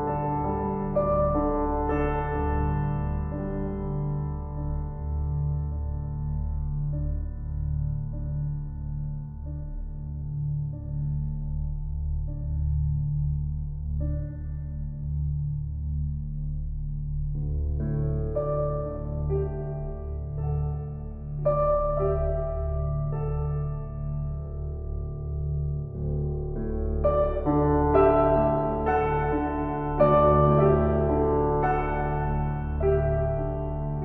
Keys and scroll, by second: 0.3 ctrl+j, 2.4 ctrl+t, 23.2 Down.